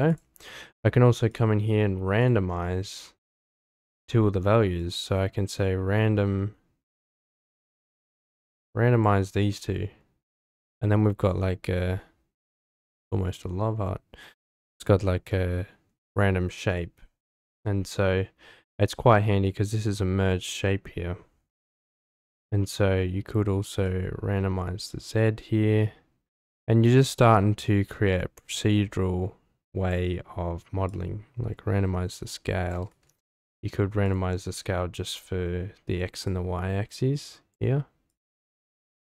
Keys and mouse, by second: 0.1 click, 1.3 click, 2.2 click, 4.8-7.0 drag, 7.4-9.0 drag, 9.5-10.0 middle drag, 10.6-14.8 middle drag, 15.3-15.8 middle drag, 16.7-17.0 middle drag, 23.8-30.0 drag, 30.9-32.8 drag, 33.2 ctrl+z, 34.0 click, 36.2-37.6 drag, 38.1-39.1 drag.